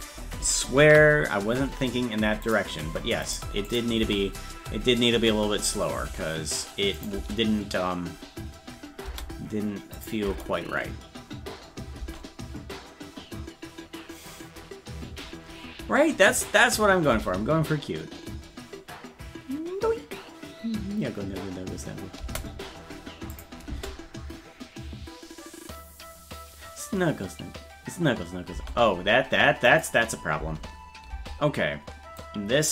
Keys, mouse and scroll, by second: 1.0 ctrl+s, 2.5 click, 3.3 click, 3.7 click, 4.0 space, 7.0 click, 7.2 space, 10.0 click, 10.3 space, 16.4 click, 23.3 click, 23.7 space, 29.7 click, 30.4 space, 32.2-32.7 drag.